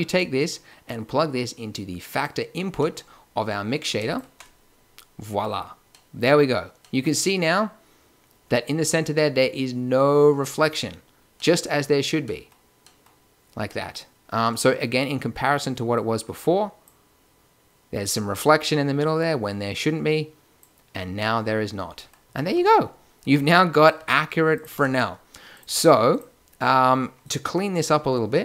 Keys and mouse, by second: 0.1-1.7 drag, 4.0-5.9 drag, 6.0 middle drag, 6.4-6.9 middle drag, 7.4 middle click, 7.6 middle click, 9.2-10.8 middle drag, 11.5 middle drag, 12.3 middle click, 13.9-15.9 middle drag, 15.9-17.6 drag, 19.7-21.6 drag, 22.2-25.6 typing.